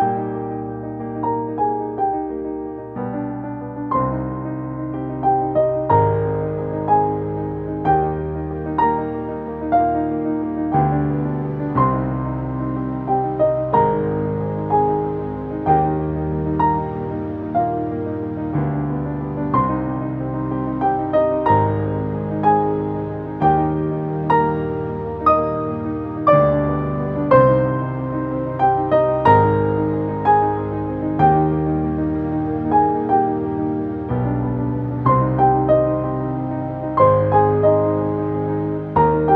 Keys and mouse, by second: 8.9 right click, 10.5 click, 13.5 click, 16.8 click, 18.9-19.6 typing, 21.0 Return, 25.3 click, 29.0-38.3 drag, 31.1 typing, 33.3 typing, 34.8 typing, 38.3 typing, 39.0 ctrl+space, 39.1 ctrl+click.